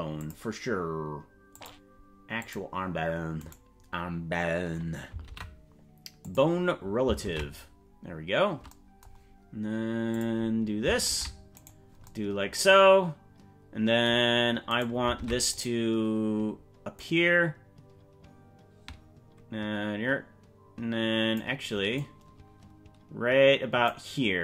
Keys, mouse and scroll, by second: 0.1 click, 1.5 click, 2.4 click, 3.6 right click, 5.2 ctrl+p, 7.4 ctrl+Tab, 10.1 click, 11.2 ctrl+Tab, 11.6 right click, 14.8 right click, 15.2 ctrl+Tab, 15.6 right click, 17.0-21.4 drag, 22.0-23.9 drag.